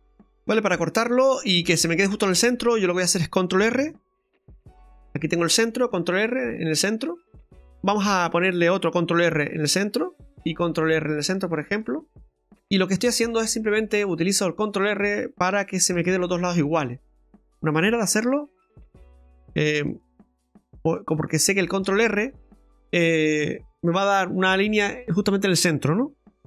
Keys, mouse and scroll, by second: 0.1 ctrl+z, 0.5 middle click, 1.1-1.8 scroll down 3, 1.4 middle click, 4.1 ctrl+r, 5.3 middle click, 6.2 ctrl+r, 7.2 middle click, 9.3 ctrl+r, 10.0 middle click, 11.8 ctrl+r, 12.5 middle click, 14.3 click, 15.1 right click, 15.5 middle click, 17.1 shift+right click, 18.3 middle click, 19.9 shift+right click, 20.4 right click, 20.9 middle click, 21.8 shift+right click.